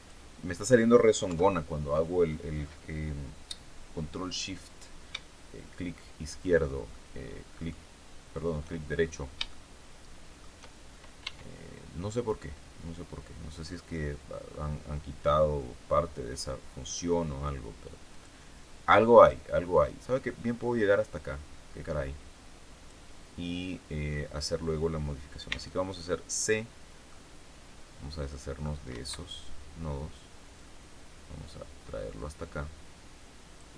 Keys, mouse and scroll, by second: 0.4 scroll down 1, 1.2 KP_3, 5.9 shift+click, 6.9 shift+middle click, 6.9 shift+click, 8.9-9.3 shift+scroll down 3, 9.4-10.5 shift+middle drag, 11.1 e, 18.1 click, 20.1-23.0 drag, 25.4 c, 27.0-28.7 middle drag, 28.8 Escape, 30.5-33.7 drag.